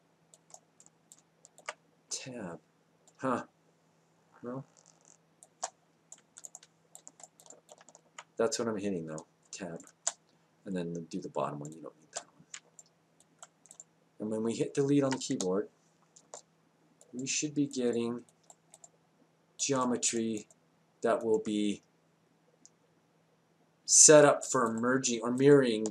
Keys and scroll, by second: 15.3 Delete.